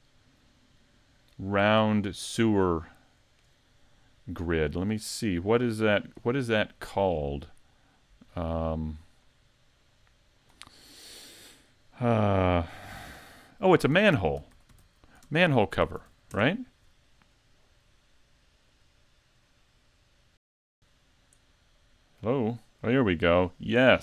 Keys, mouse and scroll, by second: 0.6 middle click, 2.0 shift+middle click, 2.3-2.8 scroll up 4, 2.8 shift+middle click.